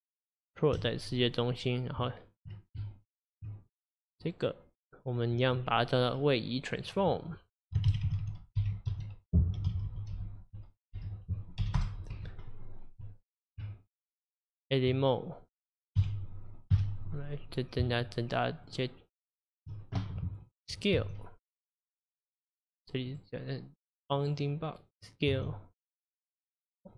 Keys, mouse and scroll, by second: 1.2 click, 1.6 click, 2.0 Tab, 2.8 Tab, 3.7 click, 4.1 click, 6.7 click, 6.9-9.9 drag, 12.3 Tab, 12.8 Tab, 13.4 click, 13.6 Tab, 15.5 click, 16.0 KP_7, 16.7 KP_Divide, 17.9 shift+click, 18.7 shift+click, 19.5 shift+click, 21.0 s, 23.1-25.3 drag, 25.3 s.